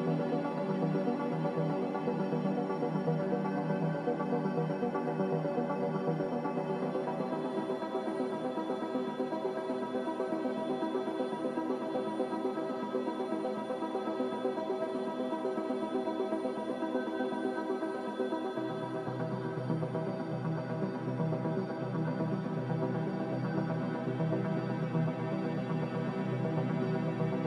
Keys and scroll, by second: 5.9 g, 12.9 2, 13.4 0, 14.3 BackSpace, 14.8 5, 18.8 typing, 21.7 Return, 23.7 a, 27.2 ctrl+c.